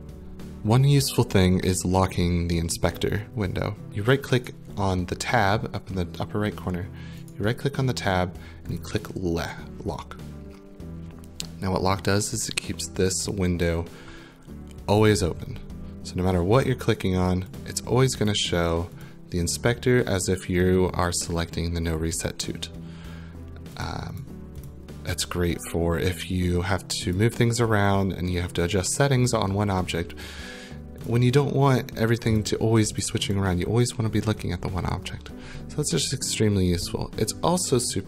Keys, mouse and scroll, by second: 3.9 click, 3.9 right click, 4.5 right click, 7.3 right click, 8.8 click, 16.7 click, 17.2 click, 17.6 click, 18.3 click, 19.0 click, 23.8 click, 24.2 click, 24.7 click, 27.2 click, 31.1 click, 31.8 click, 32.4 click, 33.0 click, 33.3 click.